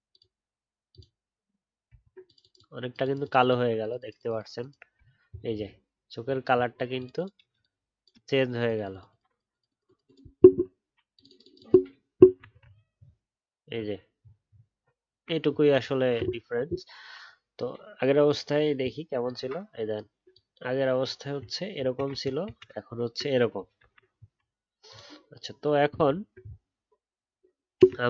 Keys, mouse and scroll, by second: 1.9-4.9 alt+scroll up 3, 4.9 alt+scroll down 1, 6.1-6.5 alt+scroll up 1, 12.7 alt+scroll down 1, 14.1-14.4 alt+scroll up 1, 22.1 ctrl+z, 22.4 ctrl+z, 26.0-26.3 alt+scroll down 1.